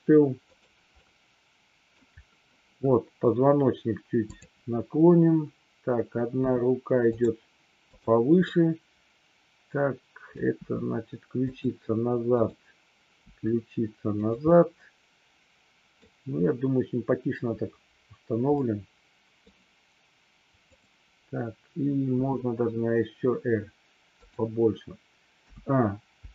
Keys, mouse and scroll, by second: 0.3 click, 1.0-2.0 middle drag, 4.3 click, 6.3 r, 7.8-8.2 drag, 8.3-10.3 middle drag, 10.6 r, 11.5 click, 12.2 click, 13.1 r, 14.5-16.1 middle drag, 18.6-19.3 middle drag, 20.6 click, 22.1 r, 25.3 a, 26.2 i.